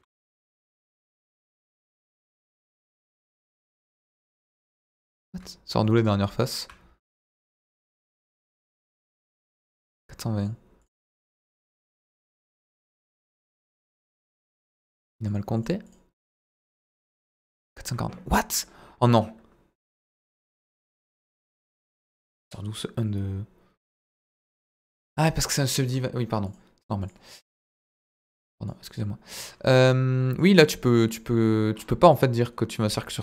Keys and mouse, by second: 0.7 a, 5.1 click, 26.4 click, 28.7 click, 30.3 click.